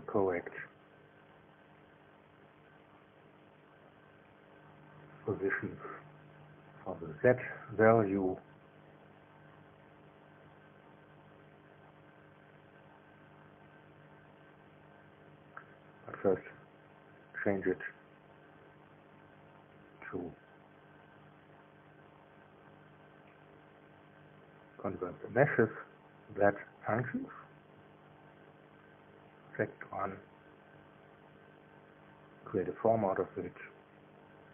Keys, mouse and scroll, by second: 5.0 click, 5.7 click, 8.4 click, 9.9 click, 13.5 click, 16.6-20.1 drag, 18.2 KP_0, 18.4 KP_Decimal, 18.7 KP_0, 18.9 KP_1, 19.5 KP_Enter, 23.8 click, 26.4 click, 27.8 click, 28.3 space, 29.0 click, 31.0 click, 32.1 click, 33.9 0, 34.2 KP_Decimal, 34.4 KP_0.